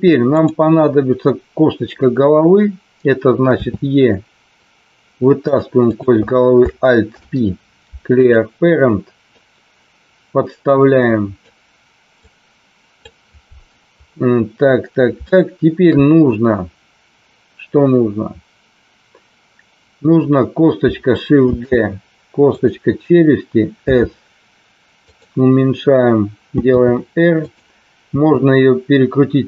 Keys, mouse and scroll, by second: 3.6 e, 5.4 click, 5.8 click, 7.1 alt+p, 9.4-11.4 drag, 12.2 click, 15.3 shift+middle click, 21.4 shift+d, 22.4 click, 23.8 s, 24.9 click, 26.8 r, 28.1 r.